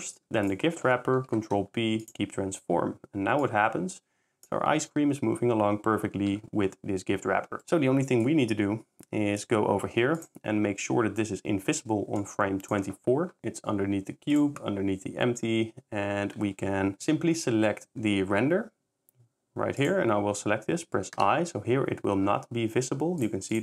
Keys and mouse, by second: 1.3 ctrl+p, 3.4 click, 4.5 s, 8.2 click, 12.2 click, 14.4 click, 19.8 click, 21.2 i, 23.3 click.